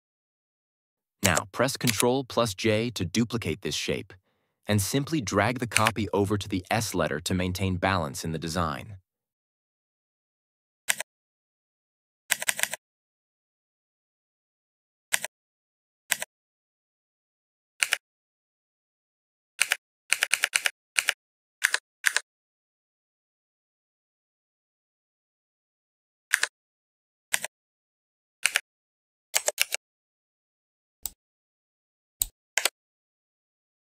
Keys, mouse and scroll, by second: 1.1 ctrl+Up, 1.8 j, 5.6 Right, 10.8 Left, 14.3 Left, 15.0 Left, 17.5 Left, 17.7 Right, 21.5 Up, 27.2 Left, 28.3 Right, 29.5 ctrl+t, 30.9-32.2 drag, 32.5 Return.